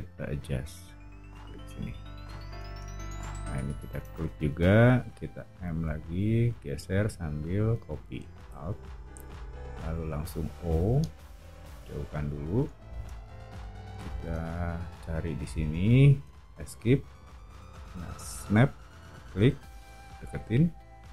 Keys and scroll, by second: 2.5 space, 5.5 m, 10.6 o, 16.8 Escape.